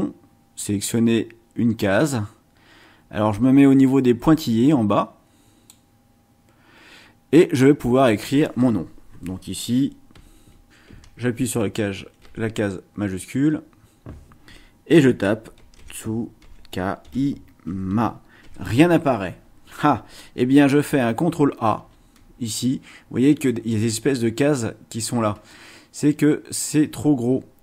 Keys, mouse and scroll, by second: 10.9 Caps_Lock, 12.2 t, 15.3-18.4 typing, 21.8 ctrl+a.